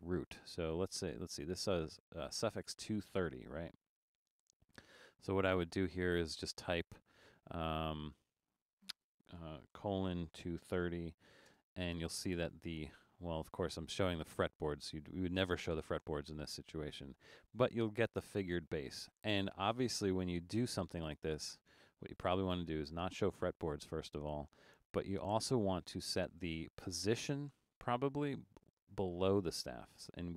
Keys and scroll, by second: 9.9-11.5 typing.